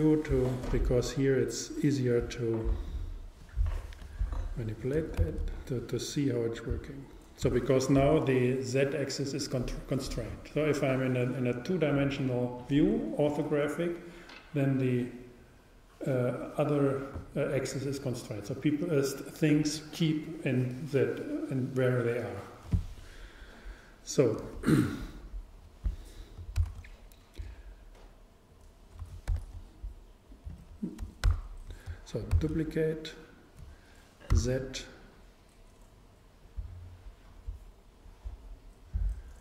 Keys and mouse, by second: 1.4-4.7 drag, 5.2 shift+d, 8.4 click, 26.6 shift+d, 31.3 super+z, 32.4 shift+d, 36.7-38.6 drag.